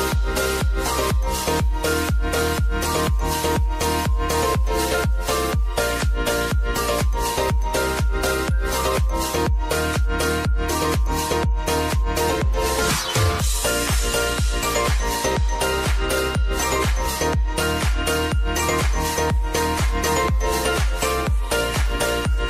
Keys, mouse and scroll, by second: 8.4 v, 8.9-22.4 drag.